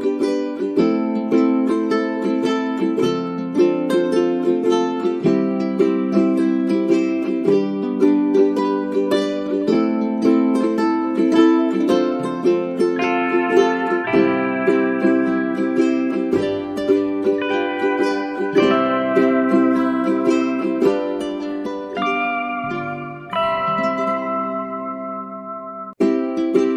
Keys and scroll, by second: 10.6 space, 12.3 space, 18.9 F9, 22.2 space, 23.6 space.